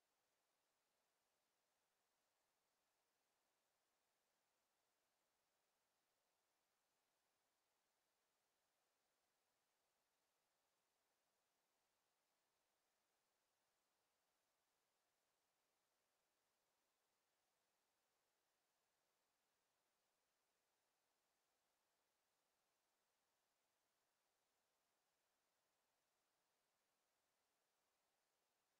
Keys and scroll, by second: 14.5 ctrl+z.